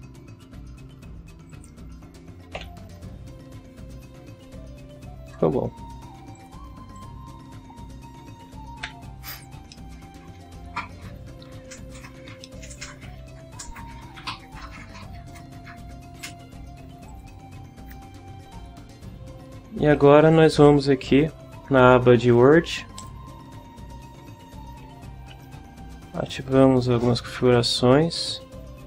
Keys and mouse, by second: 1.5 click, 2.5 F12, 6.3 click, 6.9 click, 8.8 KP_7, 9.7-10.8 middle drag, 12.4 ctrl+middle click, 15.3 click, 16.2 click, 17.1 click, 23.0 click, 26.2 click, 26.7 click, 27.5 click.